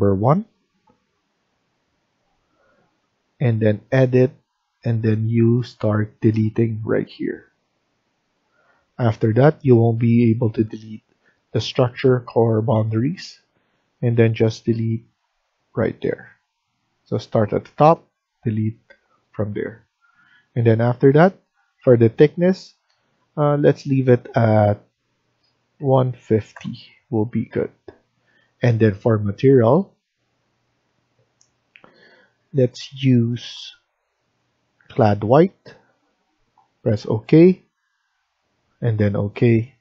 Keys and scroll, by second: 25.7-26.4 typing.